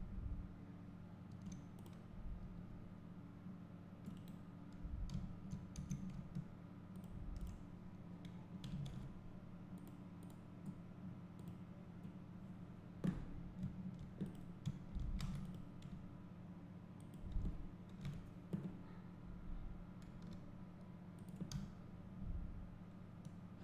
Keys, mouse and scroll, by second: 1.9 click, 2.5 s, 4.3 right click, 5.2 `, 7.1 shift+click, 14.8 `, 15.2 alt+a, 15.5 click, 17.1 shift+click, 18.0 KP_7, 20.1 g, 21.3 click, 23.0 drag.